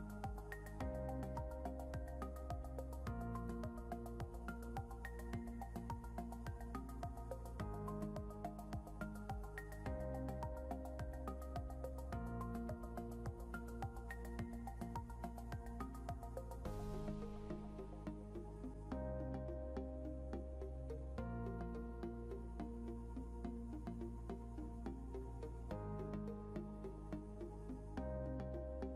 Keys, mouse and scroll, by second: 1.2 click, 11.1 click, 15.5 click, 16.0 right click, 16.5 click, 23.3 scroll up 1, 23.9 click.